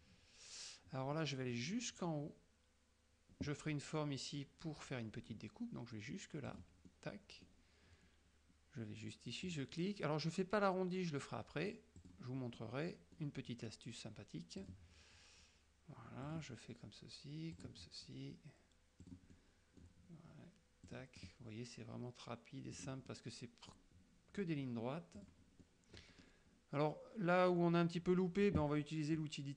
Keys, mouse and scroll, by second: 1.2 middle click, 6.6 click, 7.0 middle click, 9.6 click, 12.1 click, 12.7-13.5 middle drag, 14.7 click, 16.4 click, 17.7 click, 19.1 click, 19.4 middle click, 20.9 click, 22.8 click, 23.2 middle click, 25.3 click, 25.7 middle click, 27.6 middle click.